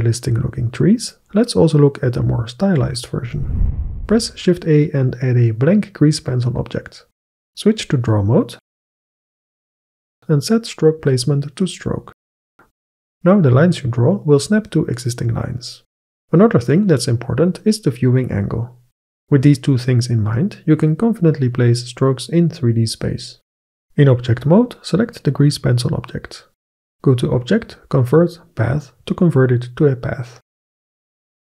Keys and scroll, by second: 4.6 shift+a.